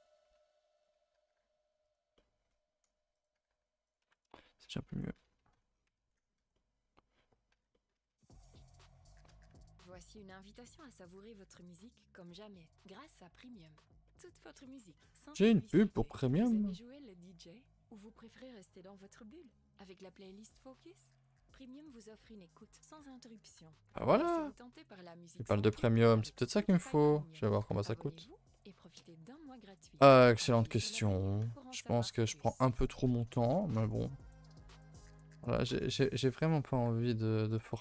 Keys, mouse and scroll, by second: 0.3 1, 0.7 click, 1.1 g, 2.1 middle click, 3.1 click, 3.3 g, 4.0 2, 4.1 click, 4.9 ctrl+Delete, 5.1-6.0 typing, 5.7 scroll down 4, 6.1 middle click, 6.4 ctrl+s, 6.5 middle click, 7.5 alt+h, 7.7 middle click, 7.9 a, 8.1 a, 8.2 middle click, 8.8 ctrl+s, 9.1 shift+middle click, 9.3 scroll up 2, 9.8 alt+click, 10.6 g, 11.9 g, 14.0 middle click, 15.0-15.3 scroll up 3, 15.3 click, 15.6 shift+click, 15.9 shift+click, 16.2 shift+click, 16.5-17.5 middle drag, 17.5 g, 19.1 ctrl+z, 19.6 alt+shift+click, 20.0 middle click, 21.0 s, 23.0 middle click, 23.5 r, 25.0 g, 27.5 g, 28.5 middle click, 29.2 a, 29.6-30.4 scroll down 3, 29.7 a, 29.9 a, 30.0 middle click, 30.4-31.0 scroll up 3, 30.5 middle click, 31.0 middle click, 31.3 2, 31.6-32.8 middle drag, 32.8 click, 33.4 3, 33.5 click, 33.8 shift+click, 34.1 shift+click, 34.4 shift+click, 34.6 middle click, 35.1 g, 35.9 middle click, 36.7 g.